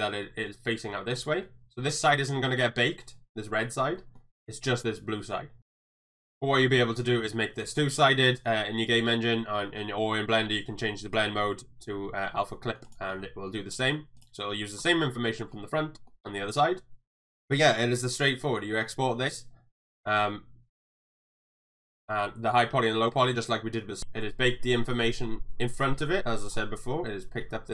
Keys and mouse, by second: 0.2 middle drag, 1.1 middle drag, 4.0 middle drag, 4.8-5.2 middle drag, 5.6 middle click, 5.8 shift+middle drag, 6.1 middle click, 11.2-12.5 drag, 12.6 middle click, 12.9 click, 13.1-13.5 middle drag, 14.2 click, 15.5 middle drag, 16.1 middle click, 16.6 middle click, 17.1 shift+middle click, 17.2 middle click.